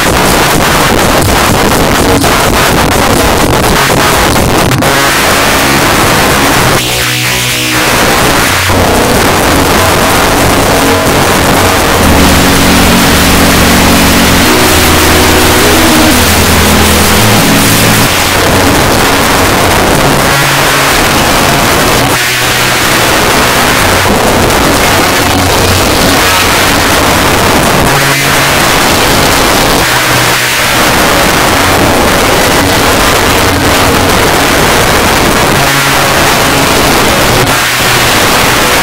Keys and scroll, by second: 18.1 Page_Down.